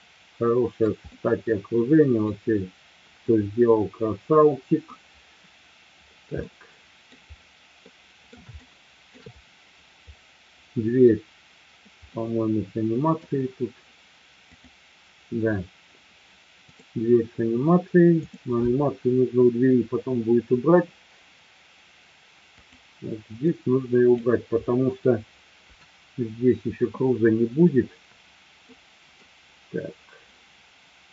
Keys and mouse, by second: 0.0-0.8 shift+middle drag, 1.1-2.3 middle drag, 3.2-4.8 middle drag, 6.5-7.1 middle drag, 7.9-8.2 middle drag, 8.6 shift+middle click, 12.1-13.3 middle drag, 14.6 click, 16.7 click, 18.2 click, 22.6 click, 23.3-24.1 drag, 25.6 Delete, 28.7-29.2 middle drag.